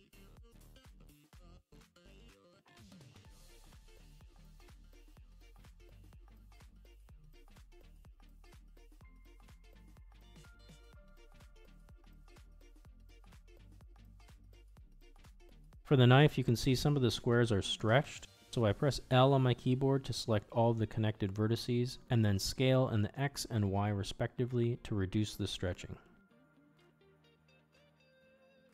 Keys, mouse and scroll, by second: 0.0 shift+middle click, 0.3 click, 0.4 shift+middle click, 0.8 Tab, 0.8 a, 0.9 u, 1.5 s, 2.4 Tab, 2.4 click, 2.6 Tab, 3.0 a, 3.2 u, 3.3 u, 3.9 s, 4.7 Tab, 5.0 Tab, 5.4 a, 5.6 u, 6.7 s, 7.4 Tab, 7.6 drag, 7.7 shift+middle drag, 7.9 middle click, 8.2 a, 8.7 u, 9.2 s, 10.2 Tab, 10.4 drag, 10.7 middle click, 10.8 middle click, 11.1 middle click, 11.4-11.8 drag, 11.8 Tab, 11.8 a, 12.0 u, 13.0 s, 13.6 Tab, 14.1 middle drag, 14.6-14.9 shift+middle drag, 15.0 middle click, 15.3 Tab, 15.4 a, 15.4 u, 16.1 s, 16.7 Tab, 17.2 middle click, 17.6 click, 17.8 Tab, 18.0 s, 19.4 ctrl+z, 19.7 click, 19.8 l, 20.3 s, 21.2 g, 22.1 click, 22.3 l, 22.6 s, 23.2 g, 23.8 Tab, 24.1 middle click, 24.2 middle click, 24.7 Tab, 24.8 a, 25.0 u, 25.5 shift+click, 25.7 s, 26.6 middle click, 27.2 Tab, 27.5 Tab, 27.8 a, 28.0 u, 28.3 click.